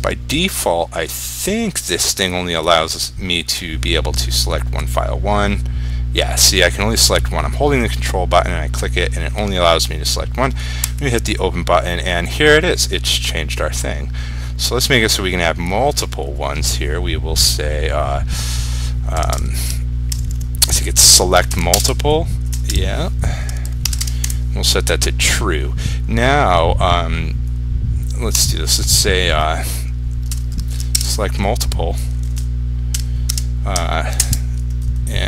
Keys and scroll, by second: 21.8 ctrl+space, 31.1 ctrl+space.